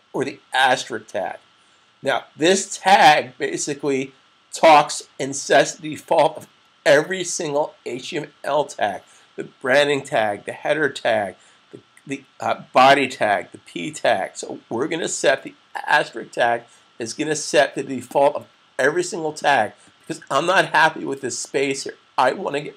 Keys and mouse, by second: 18.0 click.